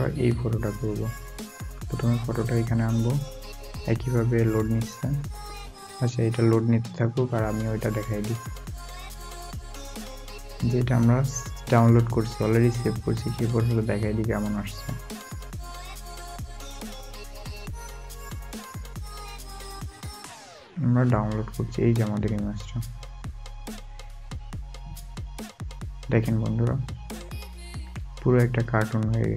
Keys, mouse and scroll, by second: 0.6 double click, 2.1 scroll down 1, 3.5 scroll up 1, 14.3 scroll up 1, 14.6 space, 22.8 space, 22.8 double click, 26.6 alt+scroll, 26.8 alt+scroll up 1, 27.8 alt+scroll up 1, 28.7 alt+scroll down 1.